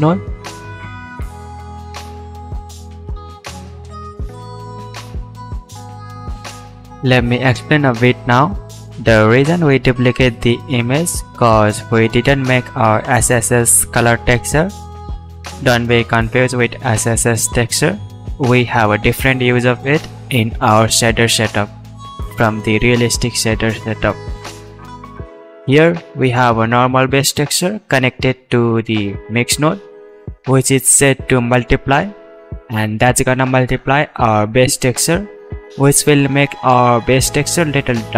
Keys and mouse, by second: 9.1 middle click, 11.4-38.1 drag.